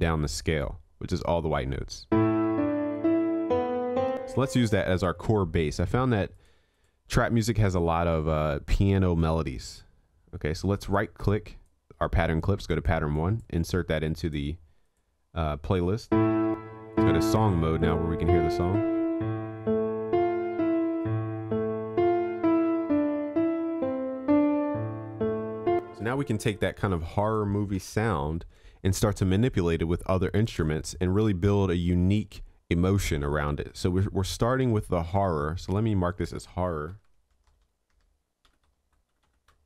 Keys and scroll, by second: 27.8 ctrl+s.